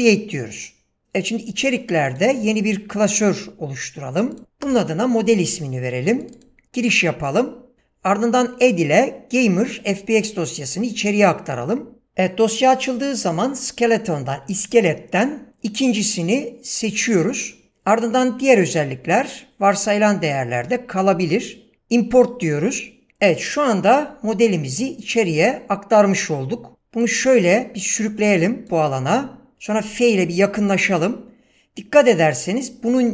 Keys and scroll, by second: 4.6 Return, 29.8 f.